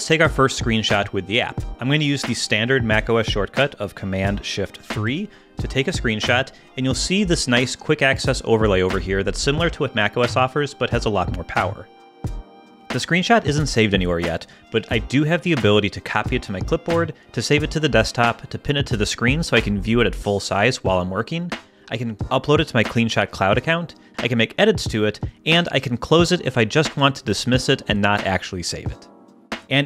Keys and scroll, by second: 4.8 shift+super+3.